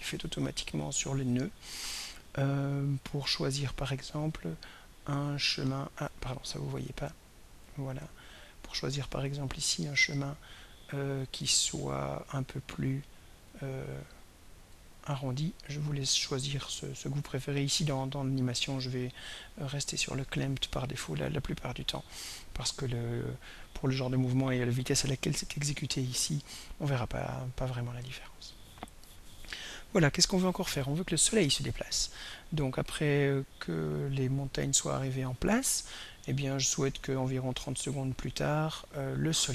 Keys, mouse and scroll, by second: 0.2 right click, 6.0 drag, 6.8-8.1 drag, 9.3 right click, 13.5 click, 14.8-19.6 drag, 23.7-39.1 drag.